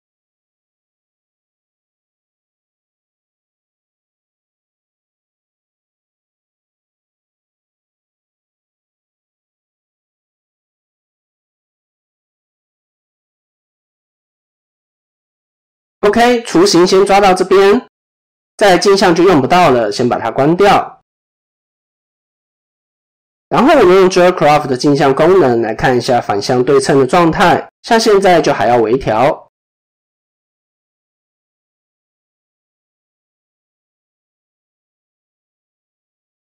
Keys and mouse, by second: 0.4 KP_7, 3.2 shift+middle click, 4.2 click, 5.9 shift+middle click, 6.9-10.4 drag, 11.1-15.5 middle drag, 15.9 KP_7, 16.8 shift+middle click, 18.5 Tab, 20.4 click, 22.4 click, 23.2-24.8 drag, 26.1 shift+middle click, 28.9 ctrl+z, 30.0 Tab, 31.1 shift+middle click, 31.8 click, 33.6-36.0 drag.